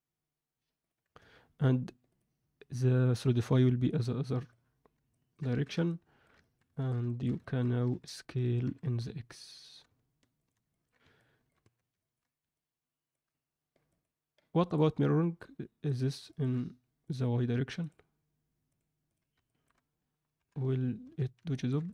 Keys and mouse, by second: 2.0 click, 3.8 click, 5.0 ctrl+alt+middle click, 5.7 alt+z, 5.8 alt+middle click, 6.4 ctrl+alt+middle click, 6.6 alt+shift+middle click, 7.0 ctrl+alt+middle click, 7.4 alt+shift+middle click, 7.8 a, 8.6 s, 10.6 ctrl+alt+middle click, 11.2 alt+middle click, 11.6 Tab, 12.0 ctrl+alt+middle click, 12.5-13.1 middle drag, 13.9 click, 14.6-15.9 drag, 16.2 ctrl+alt+middle click, 17.0 click, 18.6 drag, 19.0 click, 19.4 alt+shift+middle click, 20.3 KP_3, 21.0 z, 21.4 ctrl+alt+middle drag, 21.8 alt+shift+middle click.